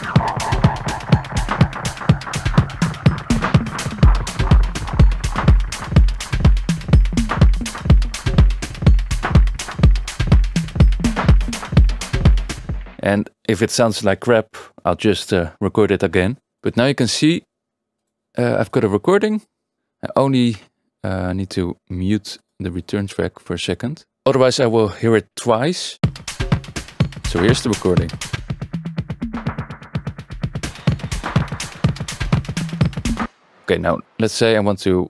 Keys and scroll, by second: 12.5 space, 20.5 Tab, 24.1 Tab, 24.3 Tab, 26.0 space, 33.2 space.